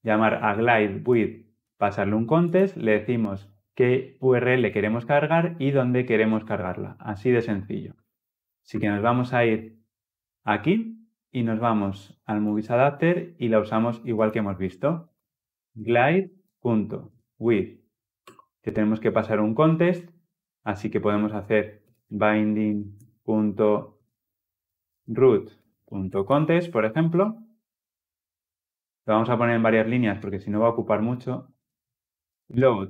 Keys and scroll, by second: 18.0 Return.